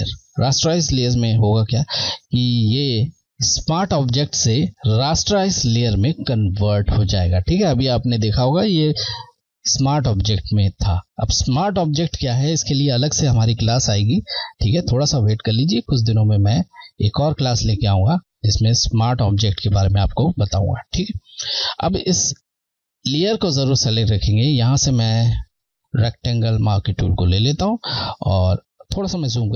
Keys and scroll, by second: 1.2 Left, 22.5 Left, 25.2 Left.